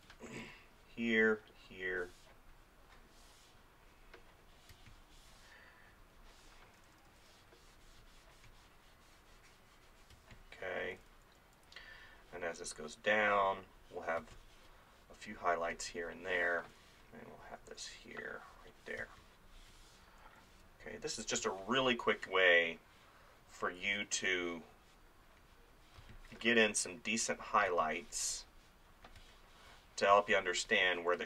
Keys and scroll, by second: 4.7 space, 6.7 [, 10.1 space, 10.9 [, 14.2 space, 16.7 [, 19.0 space, 21.4 space, 26.0 space, 27.7 space.